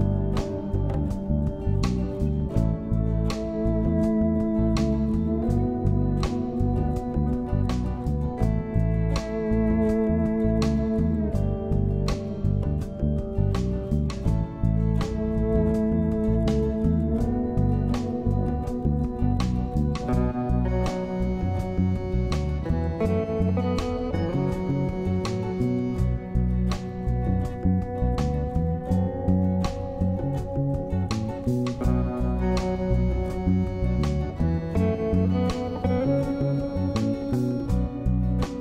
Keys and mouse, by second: 0.4 click, 0.9 click, 1.5 click, 1.5 ], 1.7 click, 2.9 ], 3.0 click, 3.3 [, 4.5 click, 5.4 [, 5.5 click, 5.7 [, 5.9 click, 5.9 [, 6.2 ctrl+z, 6.3 ctrl+z, 6.3 [, 6.5 click, 7.8 click, 8.7 click, 8.7 [, 9.2 click, 9.5 ctrl+z, 10.1 ctrl+z, 10.2-15.3 typing, 10.4 click, 11.1 click, 11.5 ctrl+z, 11.6 click, 11.9 ctrl+z, 12.1 click, 12.5 ctrl+z, 12.5 click, 12.9 click, 13.9 ctrl+z, 14.0 click, 14.6 ctrl+z, 14.6 click, 15.5 click, 17.0 [, 18.2 click, 19.0 ctrl+z, 19.0 [, 19.1 click, 19.7 ctrl+z, 19.7 [, 19.8 click, 20.1 ctrl+z, 20.3 click, 20.8 ctrl+z, 21.2 click, 21.2 [, 22.5 middle click, 23.6-24.6 middle drag, 24.7 shift+middle click, 25.8 shift+click, 26.6 click, 26.8 click, 26.9 click, 27.0-28.3 drag, 28.3 ], 28.7 ctrl+z, 28.8 ], 28.9 click, 28.9 ], 29.7 click, 29.7 [, 30.1 click, 30.5 ctrl+z, 30.5 click, 30.8-34.1 typing, 31.0 click, 31.6 ctrl+z, 31.7 click, 32.6 ctrl+z, 32.8 click, 33.7 click, 34.1 ctrl+z, 34.2 click, 35.1 click, 35.5 shift+middle click, 36.4 shift+middle click, 37.0-37.6 drag, 38.0-38.6 drag.